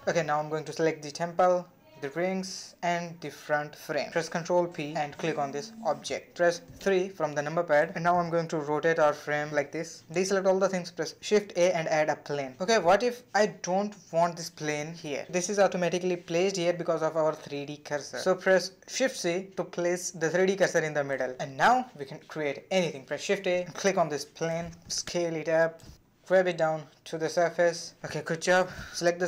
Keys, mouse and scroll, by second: 0.0 middle click, 0.0 click, 0.6 middle click, 0.8-1.3 scroll up 2, 1.3-1.9 middle drag, 1.9 shift+click, 2.6 shift+click, 3.7 ctrl+p, 7.4 KP_3, 7.6 scroll down 3, 7.9 shift+middle click, 8.2 click, 8.8 r, 9.3-9.8 scroll up 2, 9.8 a, 13.7 shift+a, 13.8-15.3 middle drag, 15.3 ctrl+z, 20.9 shift+c, 25.2 shift+a, 25.4 s, 26.4 click, 26.7 shift+middle click, 27.0 g, 28.4 scroll down 1, 28.6-29.1 middle drag, 29.1 s.